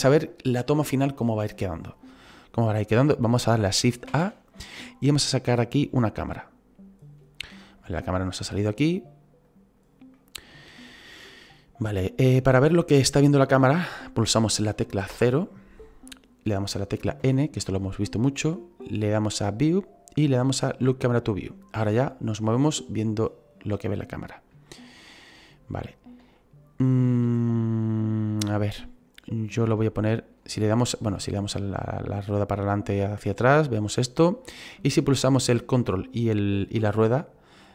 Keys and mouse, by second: 4.0 shift+a, 6.3 click, 7.4 middle click, 7.9 middle click, 9.4 click, 15.1 KP_0, 17.2 n, 19.4 click, 20.8 click, 23.8 middle click, 24.6 shift+middle click, 26.3 shift+middle click, 29.7 ctrl+middle click, 35.1 middle click.